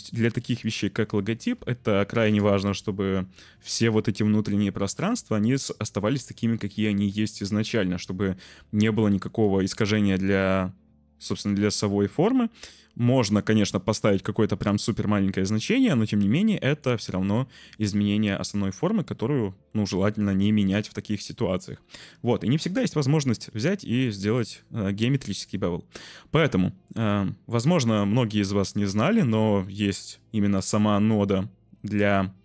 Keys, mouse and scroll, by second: 2.2 BackSpace, 3.0 shift+middle click, 10.3 ctrl+middle click, 10.4 ctrl+z, 10.8-13.4 shift+middle drag, 13.4-14.7 shift+drag, 14.7-16.2 middle drag, 16.3 click, 20.2-21.4 drag, 23.3 Delete, 24.5 `, 29.7 z.